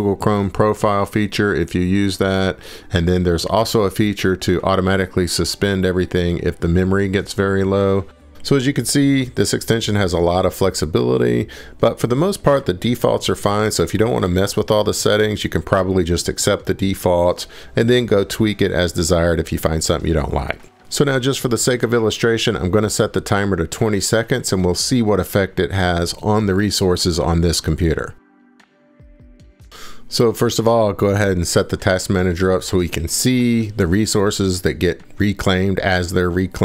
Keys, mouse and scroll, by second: 1.2 click, 3.6 click, 6.0 click, 6.5 scroll, 8.8 scroll down 1, 9.1 right click, 9.1 scroll, 9.3 scroll down 1, 13.4 click, 15.8-16.2 drag, 17.9 click, 20.4 scroll down 4, 20.7 scroll, 21.0 scroll down 3, 21.3 scroll, 22.2 click, 23.1 scroll down 7, 25.3-26.1 scroll, 26.2 click, 27.0 scroll, 28.1 click, 28.6 click, 32.3 click, 32.8 click, 33.1 click, 33.5 click, 34.0 click, 35.1 click.